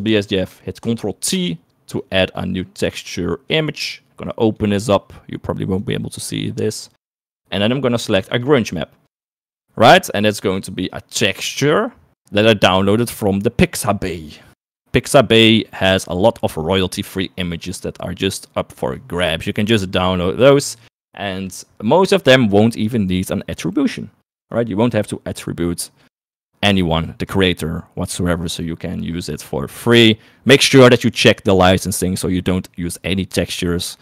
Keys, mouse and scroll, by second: 0.2 click, 0.7 middle click, 1.7 ctrl+t, 3.2 click, 4.3 middle click, 11.2 middle click.